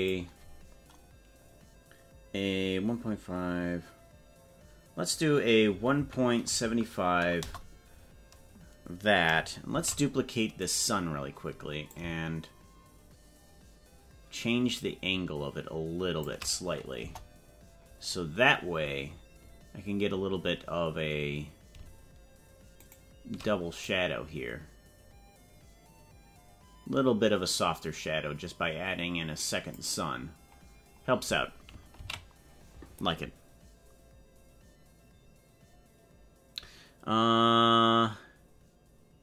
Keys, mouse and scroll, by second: 9.8 shift+d, 12.0-13.8 shift+drag, 17.0 KP_0, 18.2-18.6 scroll up 3, 22.8 shift+right click, 23.8-29.8 drag, 32.4 ctrl+s.